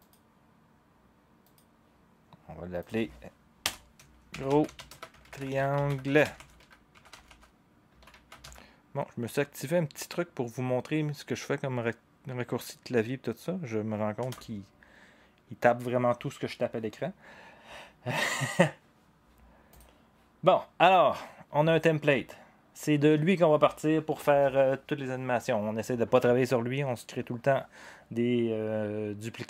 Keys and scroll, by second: 3.6 Return, 4.1-8.9 typing, 14.2 Return.